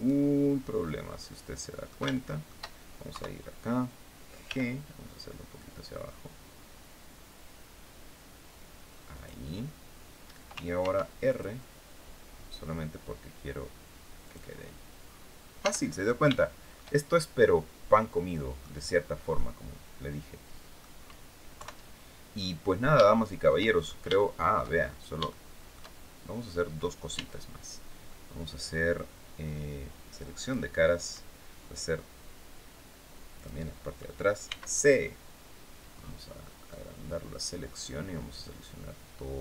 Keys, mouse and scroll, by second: 0.9 middle click, 1.8 shift+middle click, 2.8 KP_3, 4.1 g, 8.8 click, 10.5 ctrl+r, 11.0 ctrl+click, 13.9 click, 14.7-15.0 scroll down 1, 15.3 Tab, 15.5-15.8 scroll down 1, 16.0 shift+click, 16.7 shift+scroll down 1, 17.1-18.5 drag, 18.6 scroll up 1, 19.0-20.6 drag, 20.6 scroll down 1, 21.2 KP_3, 22.0 scroll up 1, 22.7 shift+click, 23.8 shift+middle click, 24.4-24.7 shift+scroll up 2, 24.9 shift+middle click, 26.0-26.3 scroll down 2, 26.8 Tab, 30.1 click, 33.0 click, 34.1 c, 35.5 scroll up 2, 35.7-36.2 scroll down 2, 36.3-39.4 drag.